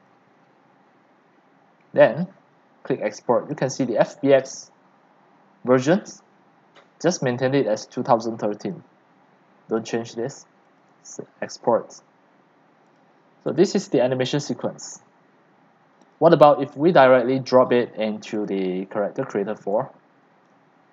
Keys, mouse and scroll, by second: 0.1 click, 0.2 middle click, 9.3-12.7 drag, 13.6 click, 14.9 click, 16.0 click, 16.3-18.4 right drag, 18.4-20.9 drag.